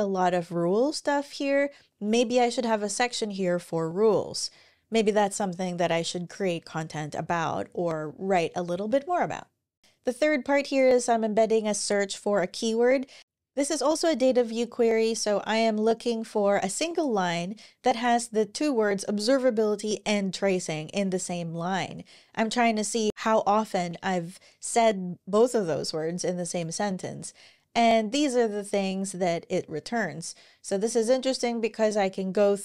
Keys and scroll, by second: 9.6 super+w, 14.0-15.8 scroll down 1.